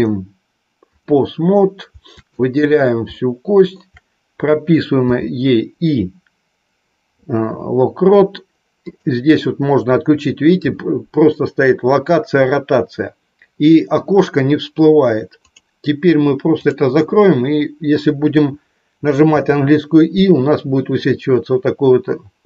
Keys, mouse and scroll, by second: 2.4 click, 3.0 shift+middle click, 8.9-19.2 drag, 19.2 i.